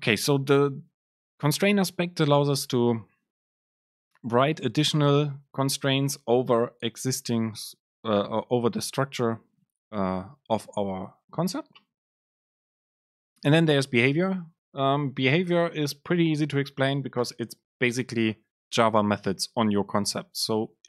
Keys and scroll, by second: 20.3 super+space.